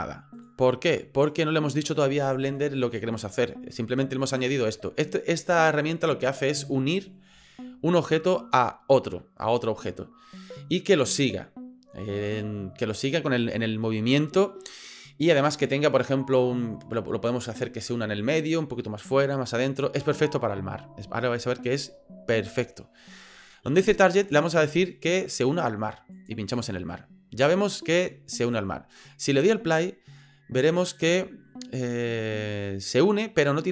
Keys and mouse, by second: 0.4 drag, 1.2 click, 24.7 click, 29.7 click.